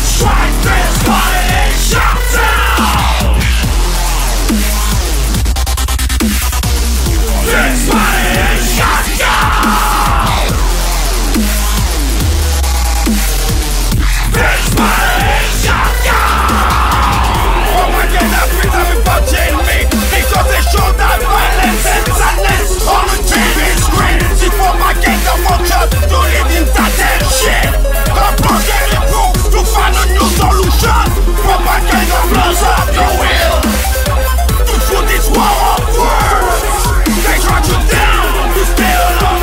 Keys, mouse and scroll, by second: 8.2-9.6 typing, 10.2 click, 17.8-19.9 middle drag, 20.0 middle click, 23.4-36.2 drag, 36.2-39.0 typing.